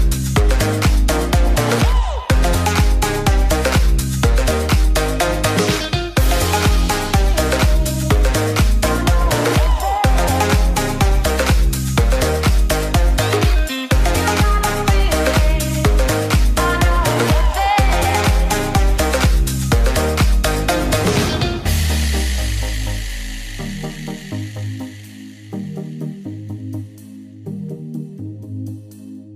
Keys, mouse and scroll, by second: 21.4 Down, 25.2-29.3 drag.